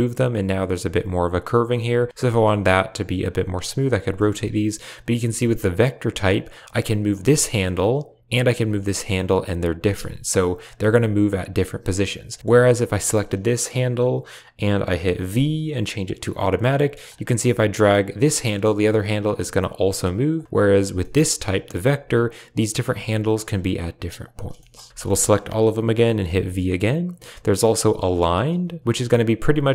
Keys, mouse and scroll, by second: 2.3 g, 4.0 shift+middle click, 4.7 click, 5.0 g, 7.0 click, 7.1 g, 8.4 click, 8.5 g, 9.7 shift+middle click, 10.5 click, 10.6 g, 12.2 click, 15.2 v, 16.9 click, 17.2 g, 19.2 g, 20.6 click, 20.9 shift+click, 21.5 click, 21.7 g, 22.7 click, 22.8 g, 24.5 shift+middle click, 24.8 a, 24.9 a, 24.9 shift+middle click, 26.1 v, 28.7 click, 28.8 g.